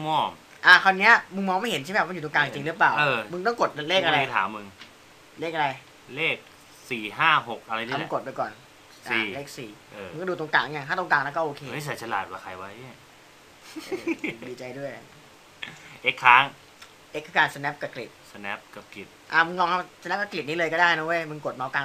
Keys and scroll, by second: 8.3 4, 16.2 x.